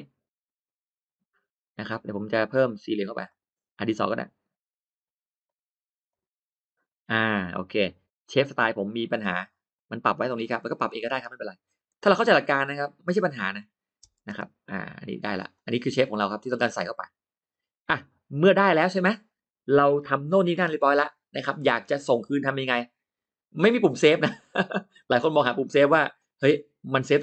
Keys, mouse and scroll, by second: 3.1 click, 4.0 click, 5.3 click, 5.9 click, 8.1 click, 9.6 click, 10.4 click, 12.0 click, 13.2 click, 14.2 space, 14.7 click, 15.4 click, 15.7 middle click, 16.3 middle click, 16.7 middle click, 17.3 middle click, 18.3 middle click, 19.0 middle click, 24.7 middle click, 26.0 click, 27.0 click.